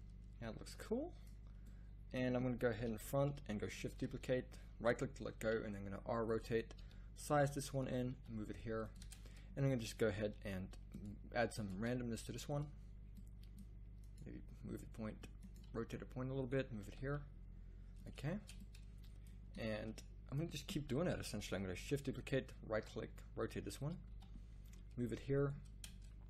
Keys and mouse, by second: 2.7 KP_1, 3.9 shift+d, 5.4 r, 6.8 s, 8.1 g, 9.0 Tab, 10.3 g, 11.7 g, 14.2 g, 15.6 r, 17.0 g, 18.4 Tab, 20.9 KP_1, 21.7 shift+d, 22.7 r, 24.1 g, 25.8 Tab.